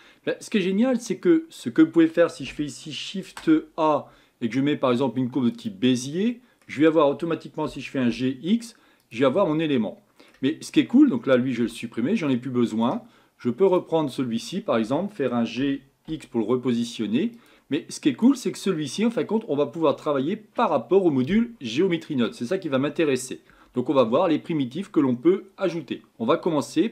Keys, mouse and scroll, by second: 0.9-3.3 middle drag, 3.3 shift+a, 6.3-7.7 middle drag, 7.7 g, 9.5-10.7 middle drag, 10.7 click, 11.6 Delete, 12.4-13.7 middle drag, 13.7 click, 15.6 g, 17.8-18.7 middle drag, 18.7-19.1 scroll up 6, 19.5-20.1 scroll down 4, 20.1-23.2 middle drag.